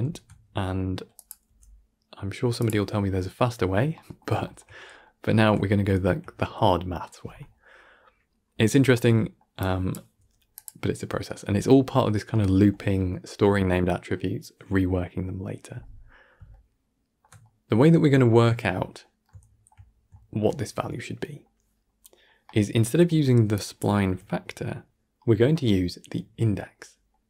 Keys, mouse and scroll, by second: 1.0 drag, 3.8-4.7 middle drag, 4.7 scroll up 1, 4.9-9.5 middle drag, 9.5 click, 17.8-20.0 drag, 20.0-23.4 shift+middle drag, 23.4 drag.